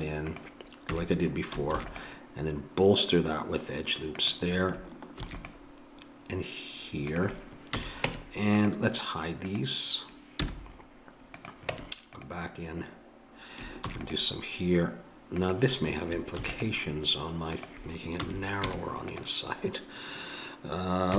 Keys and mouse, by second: 0.9 a, 1.8 ctrl+r, 5.2 ctrl+r, 7.7 a, 8.1 Tab, 9.4 right click, 10.4 h, 10.7 middle click, 11.4 click, 11.7 Tab, 13.8 ctrl+r, 16.4 ctrl+r, 18.2 a, 18.7 Tab.